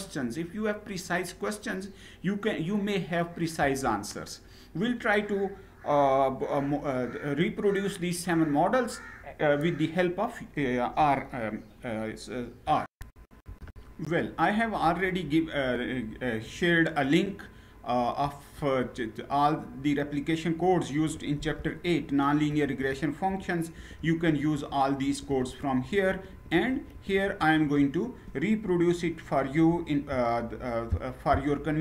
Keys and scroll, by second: 3.6 Down, 12.9 shift+F9, 17.9 Down, 18.5-20.8 Down, 21.5 Page_Down, 22.2 Page_Down, 22.5 Page_Down, 22.9 Page_Down, 23.4 Page_Down, 23.6 Page_Down, 23.9 Page_Down, 24.2 Page_Down, 24.7 Page_Down, 24.9 Page_Down, 25.1 Page_Down, 25.4 Page_Down, 25.6 Page_Down, 26.1 Page_Down, 26.3 Page_Down, 26.4 Page_Down, 26.6 Page_Down, 26.9 Page_Down, 27.1 Page_Down, 27.4 Page_Down.